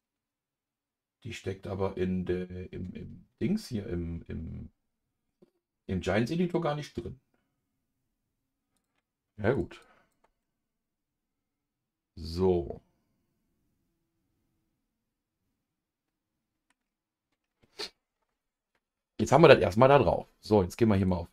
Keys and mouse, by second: 9.5 click, 10.4-16.8 middle drag.